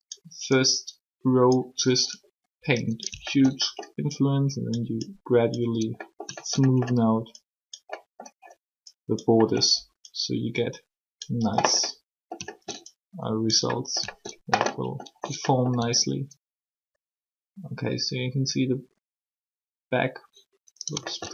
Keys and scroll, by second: 15.8 r.